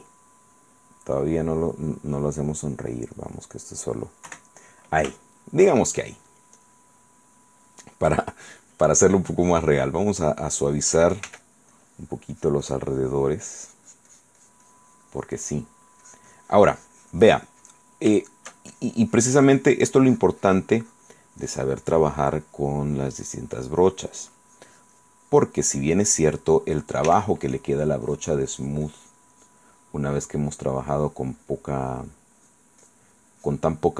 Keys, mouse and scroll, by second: 1.2-2.6 drag, 2.9 click, 3.2 click, 4.5 KP_1, 5.4 shift+middle click, 6.8 click, 7.4 click, 9.2 click, 9.9 click, 10.3-11.9 middle drag, 11.5 f, 11.9 click, 12.5-16.0 drag, 16.2-18.2 drag, 18.4 shift+click, 18.9-21.5 shift+drag, 21.6-23.1 drag, 23.4-25.7 drag, 25.8 middle click, 26.5 middle click, 27.3 f, 27.7 click, 28.3-30.2 drag, 30.5 click, 32.1 click, 32.6 click, 33.0 click, 33.6 click.